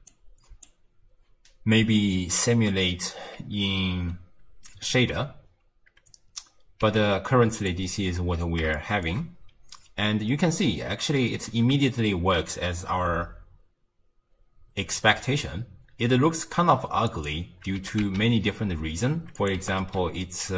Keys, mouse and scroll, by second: 0.1 click, 6.8 z, 8.7-13.4 shift+middle drag, 17.1 click, 17.8 g, 19.6 g.